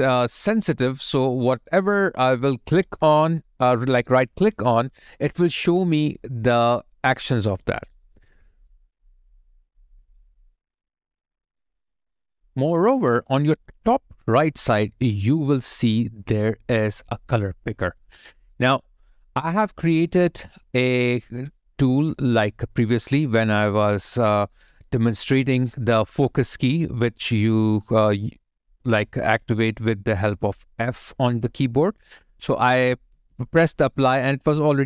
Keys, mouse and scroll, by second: 7.7 right click, 27.8 alt+click, 32.0 alt+right click, 32.7 alt+middle click.